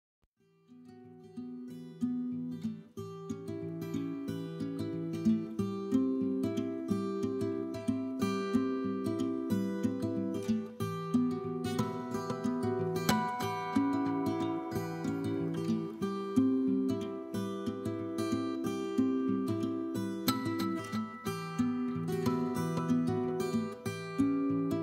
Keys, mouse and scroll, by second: 0.4 g, 1.6 click, 1.7 middle click, 1.9 scroll up 2, 2.2 click, 2.4 middle click, 2.6 shift+click, 2.7 middle click, 3.0 KP_3, 3.4 g, 4.3 click, 4.4 middle click, 4.9 shift+click, 5.1 shift+click, 6.0 KP_3, 6.3 g, 7.9 click, 8.0 scroll down 1, 8.1 middle click, 8.5 scroll up 1, 8.6 middle click, 9.0 scroll down 1, 9.1 middle click, 9.5 scroll up 1, 9.6 middle click, 9.8 click, 9.9 scroll down 1, 10.0 middle click, 10.2 KP_3, 10.8 scroll down 1, 10.9 middle click, 11.0 scroll up 1, 11.2 middle click, 11.4 scroll down 1, 11.5 middle click, 11.8-12.1 scroll up 2, 11.9 middle click, 12.1 scroll down 1, 12.2 middle click, 12.6 scroll up 1, 13.5 k, 14.6 Return, 14.7 scroll down 1, 14.9 click, 15.0 middle click, 15.3 scroll up 1, 15.5 middle click, 15.8 click, 16.5 KP_1, 17.0 click, 17.6 c, 18.3 right click, 18.5 g, 19.8 click, 19.9 middle click, 20.7 KP_1, 21.1 click, 21.4 g, 22.0 click, 22.1 middle click, 22.3 scroll down 1, 22.4 middle click, 22.6 click, 22.7 scroll up 1, 22.8 middle click, 23.2 click, 23.3 scroll down 1, 23.4 middle click.